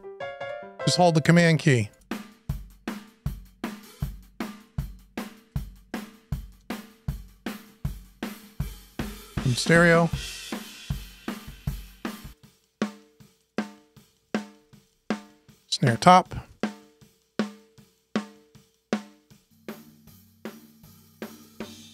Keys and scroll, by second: 8.6 Return, 16.3 Return.